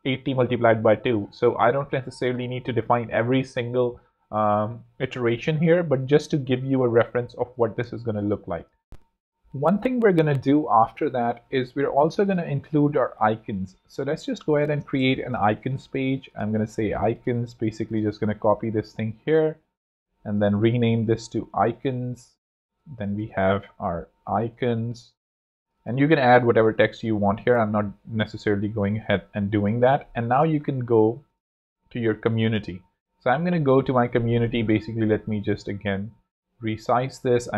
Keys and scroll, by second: 7.3 alt+z, 7.7 alt+space, 8.7 space, 14.0-15.7 typing, 16.3 Return, 18.1 super+v, 20.7 super+r, 21.1 shift+super+i, 21.2 shift+c, 21.6 Return, 22.6 super+Return, 23.6 shift+super+i, 23.9-25.1 typing, 30.9 Escape, 33.9 Escape, 34.4 super+Escape, 34.5 ctrl+super+f.